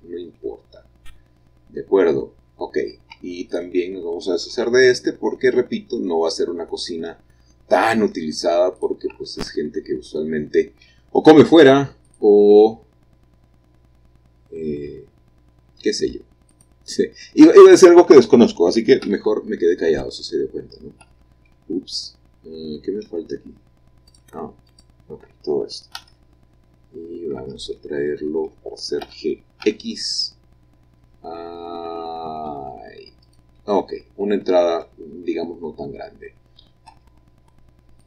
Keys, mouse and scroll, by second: 1.1-3.3 middle drag, 3.3 Tab, 3.7-4.7 drag, 4.7 x, 5.1-6.1 drag, 6.4-7.6 middle drag, 7.6-9.0 scroll up 1, 9.0 click, 10.1-11.7 middle drag, 11.7 x, 12.2-13.4 drag, 14.3 middle click, 14.8-16.8 middle drag, 16.7 shift+click, 19.2 g, 19.3 g, 21.2 Escape, 24.3-25.9 shift+drag, 26.2 g, 26.3 g, 27.6 Escape, 29.2 g, 29.8 x, 33.4-34.8 drag, 37.1 1.